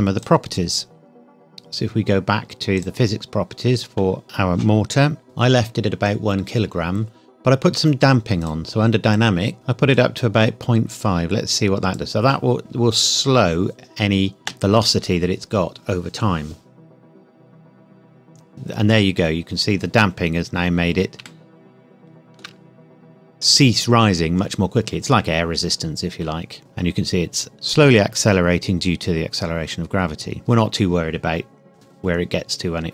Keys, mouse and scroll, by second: 0.1 click, 2.7 click, 4.2-4.9 scroll up 1, 4.9 scroll down 1, 5.0 scroll up 1, 8.4 click, 9.9 click, 14.4 space, 21.1 space, 21.2 shift+middle click, 22.7-23.0 scroll up 1, 26.4 scroll up 1.